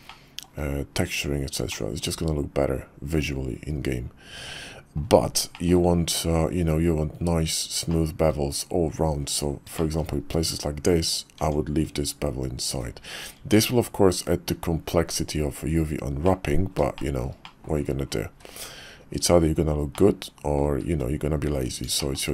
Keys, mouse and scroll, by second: 0.1 shift+click, 0.1-0.4 shift+middle drag, 1.7-5.0 middle drag, 5.5 shift+middle drag, 7.9-8.2 shift+middle drag, 9.8 shift+middle click, 11.4 Tab, 13.4 Tab, 16.3 click, 16.9 shift+middle drag, 17.5 middle click, 18.3 `, 19.0 KP_5, 20.0-20.6 middle drag, 20.8 `, 22.0 shift+middle click.